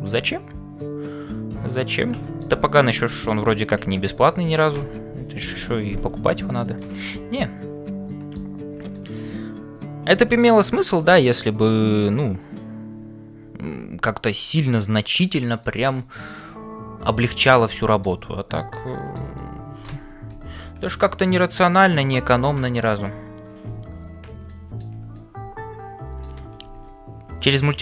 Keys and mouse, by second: 2.2 shift+middle click, 3.0 middle click, 3.9 shift+middle click, 5.5 2, 6.2 click, 6.9-8.3 middle drag, 8.9 middle click, 9.4 middle click, 10.7 shift+middle click, 11.2-15.5 middle drag, 16.0 shift+middle click, 18.9 shift+middle click, 19.4 middle click, 20.4 1, 21.9 shift+2, 24.4 shift+middle click, 25.1-27.8 middle drag, 26.9 ctrl+s.